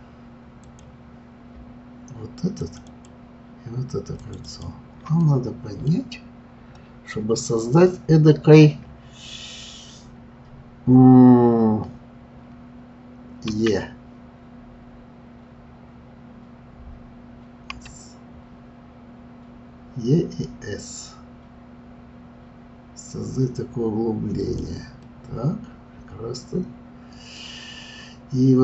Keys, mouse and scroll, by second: 0.6 click, 2.6 shift+click, 2.8 shift+click, 4.2 shift+click, 4.4 shift+click, 5.2 middle click, 13.5 e, 25.0-27.7 middle drag, 27.7-28.6 scroll up 1.